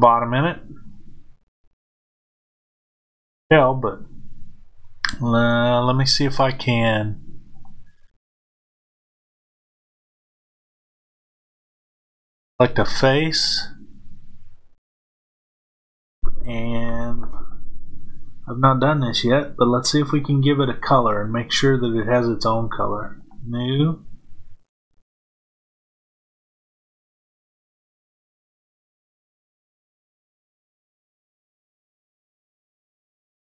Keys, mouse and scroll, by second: 0.2-7.5 middle drag, 7.5-13.5 drag, 14.9 click, 20.1 click, 23.1-24.5 drag, 32.0 click.